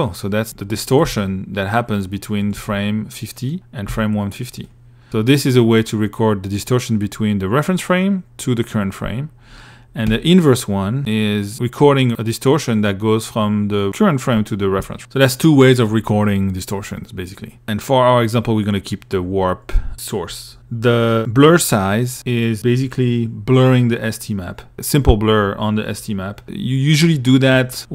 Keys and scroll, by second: 0.3 2, 1.8 1, 3.1 2, 4.2 1.